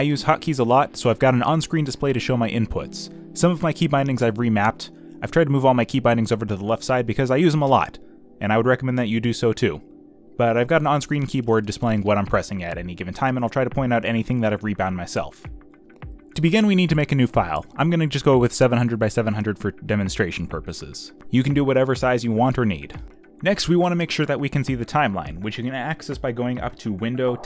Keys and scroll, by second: 10.4 space, 17.7 ctrl+n.